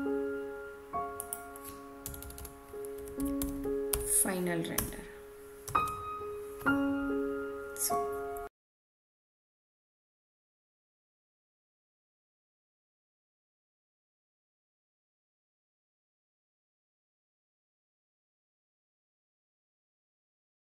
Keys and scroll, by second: 2.0 BackSpace, 4.7 Return.